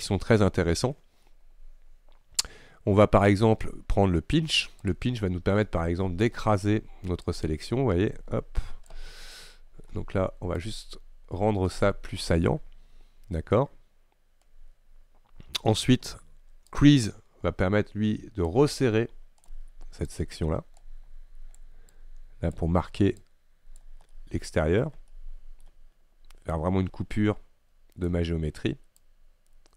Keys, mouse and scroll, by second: 5.0 click, 5.7 middle click, 6.4-7.3 scroll up 1, 7.3-9.1 drag, 9.1-9.6 scroll down 2, 9.6 middle click, 9.9-10.6 scroll up 1, 10.6-24.2 drag, 24.2-25.7 middle drag, 25.7-26.6 scroll up 1, 26.6-29.7 drag.